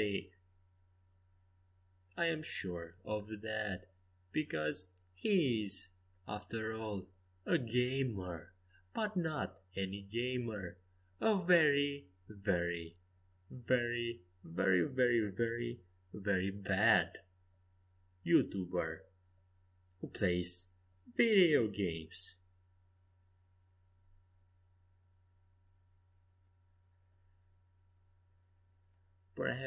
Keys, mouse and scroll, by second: 1.8 Escape, 2.4 a, 3.5 c, 5.7 s, 7.6 g, 9.9 a, 10.4 c, 13.1 a, 14.6 z, 19.3 ctrl+z, 19.6 ctrl+z, 19.8 ctrl+z, 20.0 ctrl+z, 20.2 ctrl+z, 21.3 ctrl+z, 21.5 ctrl+z, 21.8 ctrl+z, 22.1 ctrl+z, 27.0 ctrl+z, 28.4 a, 28.9 ctrl+z, 29.2 ctrl+z.